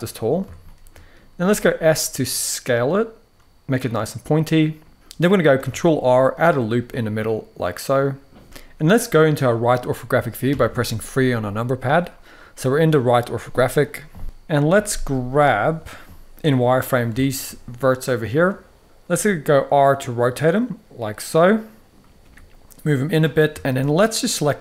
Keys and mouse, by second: 0.3-0.7 shift+middle drag, 1.2 s, 3.7 click, 4.2 middle click, 5.3 ctrl+r, 6.2 click, 6.6-7.7 middle drag, 8.5 KP_1, 10.2 KP_3, 14.6 click, 15.5 z, 16.3 click, 16.9 shift+middle drag, 18.8 r, 21.7 click, 21.9 g, 22.7 click, 23.3 shift+middle click, 23.8 click.